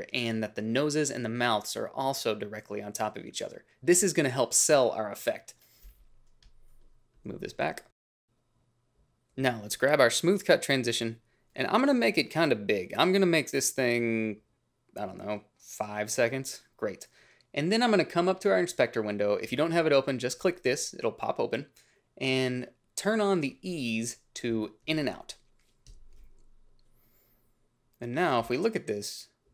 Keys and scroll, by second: 8.7 n.